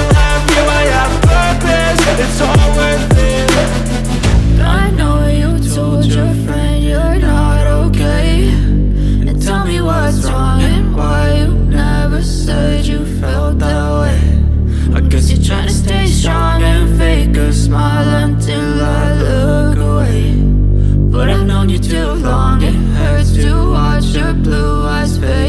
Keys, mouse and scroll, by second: 5.2 click, 10.2 click, 23.5-25.4 drag.